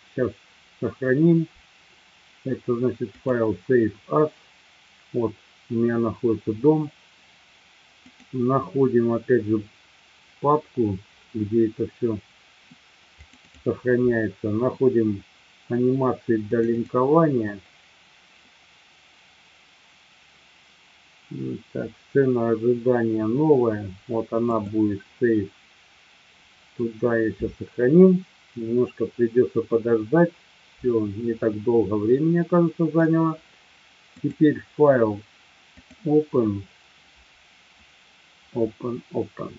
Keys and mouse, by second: 31.5-33.0 middle drag, 34.2-36.2 drag.